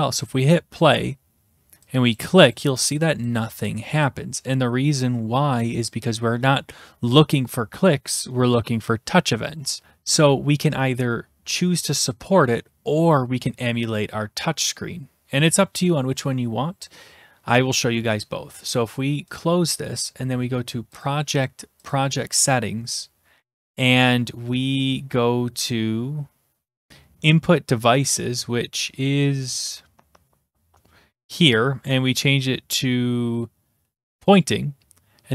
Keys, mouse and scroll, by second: 0.3 click, 2.2 click, 2.5 click, 2.9 click, 3.3 click, 3.7 click, 4.0 click, 9.8 click, 19.4 click, 21.0 click, 21.9 click, 27.2-28.0 scroll, 28.0-29.1 scroll, 29.1-30.3 scroll, 34.3 click.